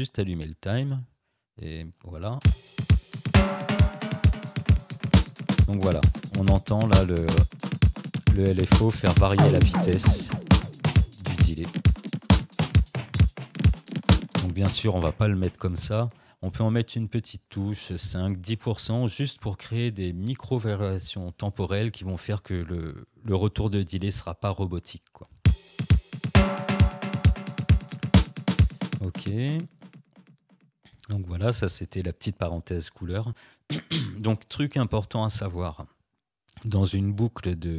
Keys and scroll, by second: 2.4 space, 14.3 space, 25.4 space, 28.8 space.